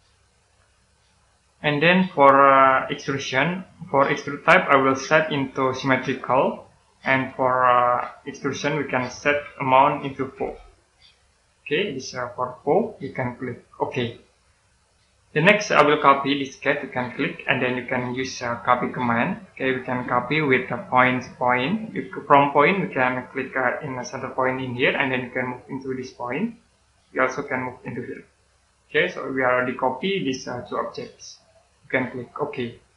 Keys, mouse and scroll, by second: 4.7 click, 10.3 4, 10.9 click, 13.6 click, 14.6-17.0 scroll up 1, 17.0 click, 23.0-23.5 scroll up 1, 24.7 click, 29.0 scroll down 1, 32.3 click, 32.8-32.9 scroll down 1.